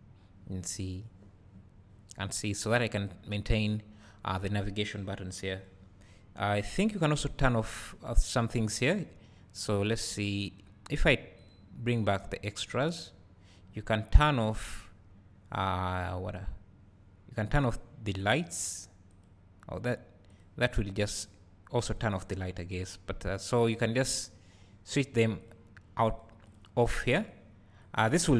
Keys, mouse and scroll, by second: 3.4-28.3 drag.